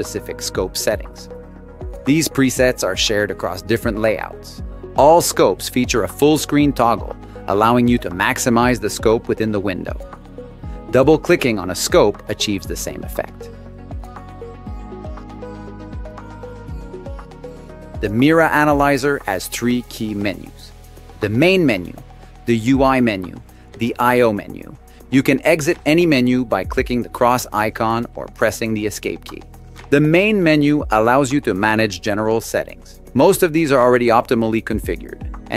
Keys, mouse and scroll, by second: 14.1 click, 14.2 click.